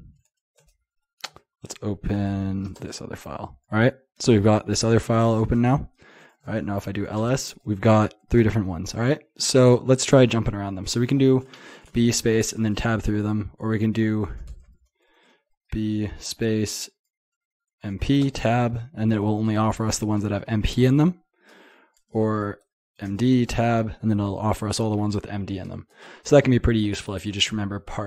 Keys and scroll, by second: 0.0-0.9 typing, 1.3 Tab, 1.7 Tab, 2.3 shift+Tab, 2.5 shift+Tab, 14.5 typing.